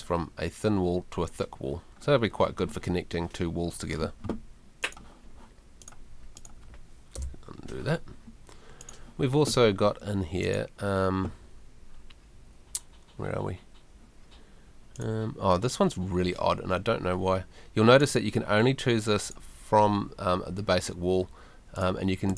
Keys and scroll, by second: 7.2 BackSpace.